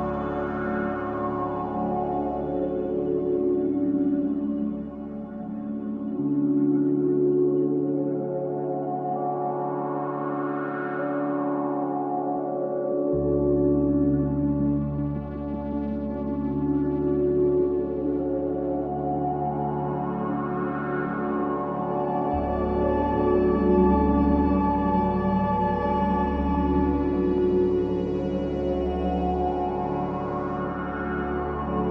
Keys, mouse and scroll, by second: 0.7 click, 3.3-9.0 drag, 9.2 click, 11.2-12.6 drag, 12.6-14.2 middle drag, 14.2-16.2 scroll down 2, 16.2-17.0 scroll down 1, 17.0 click, 22.6 click, 28.9-31.9 drag.